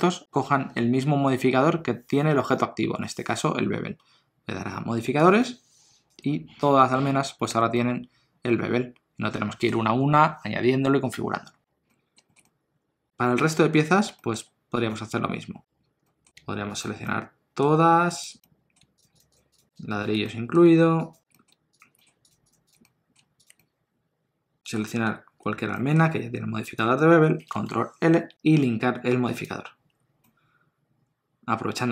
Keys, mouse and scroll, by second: 7.1 scroll down 1, 7.4 alt+a, 7.7 middle click, 11.4-11.9 scroll down 1, 11.9 middle click, 12.2 shift+middle click, 12.4 middle click, 14.1 shift+middle click, 14.9 click, 16.0 middle click, 16.8 shift+click, 17.0 middle click, 18.2 shift+click, 18.4 middle click, 18.9 shift+click, 20.2 middle click, 20.9 shift+click, 21.3 middle click, 21.7 shift+click, 21.9 middle click, 22.3 shift+click, 23.5 shift+click, 23.6 middle click, 25.7 middle click, 26.6 shift+click, 28.1 ctrl+l, 30.2 middle click.